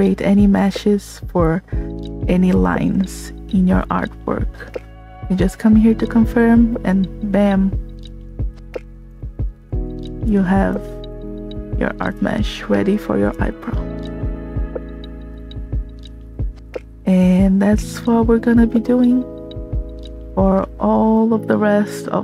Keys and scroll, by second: 15.4 space, 20.9 s.